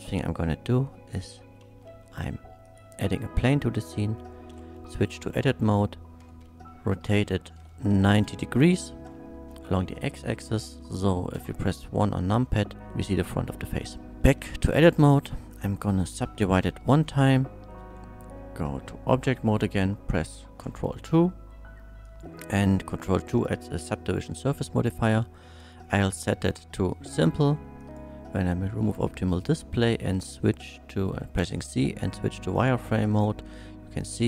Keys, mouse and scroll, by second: 1.2 shift+a, 1.6 shift+a, 2.6 click, 3.7 middle click, 4.5 Tab, 6.2 r, 7.2 x, 7.8 KP_9, 7.9 KP_0, 8.1 Return, 8.9 Tab, 11.3 KP_1, 13.8 click, 14.1 Tab, 14.4 2, 15.5 Tab, 15.5 click, 16.9 middle click, 17.8 Tab, 20.2 ctrl+2, 22.0 click, 25.6 click, 26.5 click, 27.8 click, 31.4 z, 32.5 click, 32.5 z.